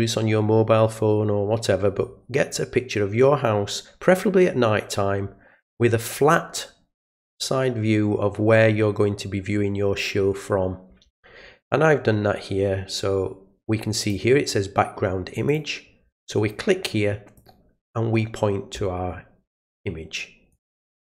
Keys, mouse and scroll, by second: 14.0 click, 15.5 click, 17.4 click, 19.5 click, 20.5 click.